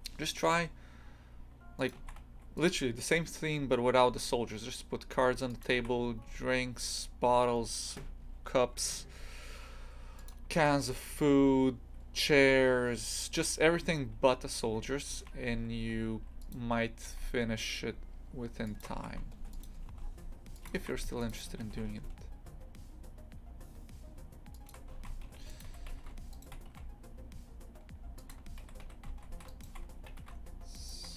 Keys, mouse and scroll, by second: 2.0 shift+f, 4.1 e, 5.8 shift+f, 10.5 shift+f, 19.0 shift+f, 19.9 s, 20.8 shift+f, 21.6 e, 24.9 shift+f, 25.6 2, 25.9 a, 26.3 alt+shift+right click, 26.7 s, 28.6 3, 28.8 a, 29.3 a, 29.5 right click, 30.1 a, 30.7 alt+shift+right click.